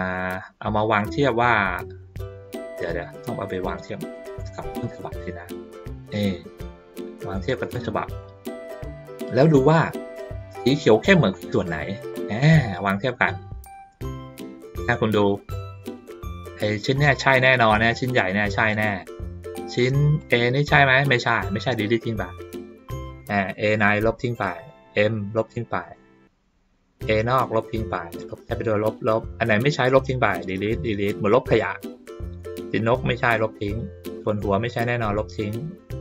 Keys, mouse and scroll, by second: 3.8 middle click, 4.6 ctrl+middle click, 6.0-8.1 drag, 8.5 ctrl+middle click, 8.8 ctrl+middle click, 8.9-10.3 ctrl+scroll down 2, 10.3 ctrl+scroll down 1, 10.9 middle click, 12.5-13.7 middle drag, 15.2 click, 16.9 click, 20.2 click, 23.4 click, 24.5 click, 25.8 click, 28.0 click, 28.7 click, 29.5 click, 30.6 click, 31.3 click, 32.8 click, 34.1-34.5 drag.